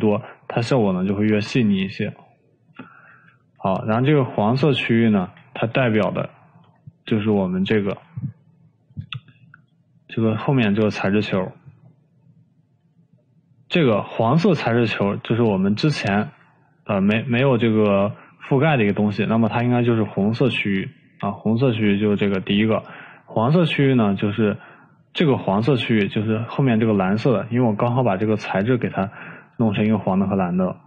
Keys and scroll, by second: 3.6 ctrl+z, 4.0 ctrl+z, 4.4 ctrl+z, 4.8 ctrl+z, 5.0 ctrl+z, 5.2 ctrl+z, 5.4 ctrl+z.